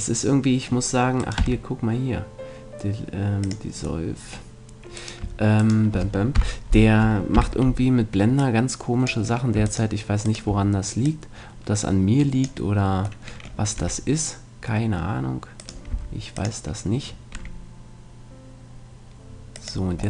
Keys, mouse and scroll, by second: 1.2-2.8 right drag, 1.4 x, 2.9 right click, 4.0 middle click, 5.0-6.4 right drag, 6.4 KP_1, 7.4 KP_3, 8.4-10.2 drag, 9.7-12.2 right drag, 11.0-13.0 drag, 13.2-15.2 middle drag, 13.8 e, 15.8-17.4 right drag, 15.9 s, 17.0-18.2 drag, 17.3 e, 17.4 middle click, 19.6 click.